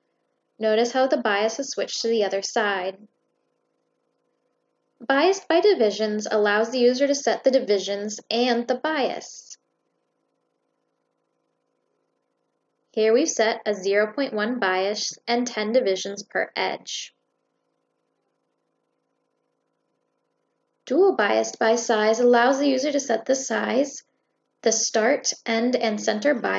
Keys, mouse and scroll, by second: 2.1 click, 4.9 click, 7.5 click, 12.9 click, 19.0 click, 20.5 click, 22.0-23.1 drag.